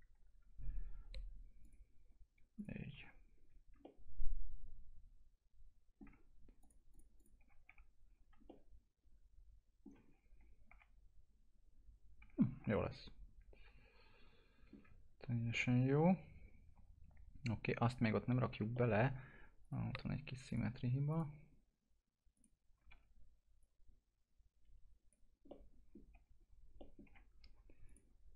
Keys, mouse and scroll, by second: 0.7-1.6 scroll down 1, 1.6 click, 2.9 F4, 3.2-3.7 scroll down 1, 3.8-6.6 alt+middle drag, 6.6 click, 7.4 F4, 8.0 scroll down 1, 8.5-10.1 alt+middle drag, 10.1-10.7 scroll up 1, 10.7 F4, 12.5 scroll down 1, 12.8-14.9 alt+middle drag, 14.9-15.6 scroll down 1, 17.4 scroll up 1, 18.5 F4, 18.7 middle click, 19.1 scroll up 1, 19.6 click, 22.9 w, 23.6-25.5 drag, 25.5 middle click, 26.1 F4, 26.4-26.7 scroll down 1, 26.8 middle click, 27.0 F4, 27.9 click.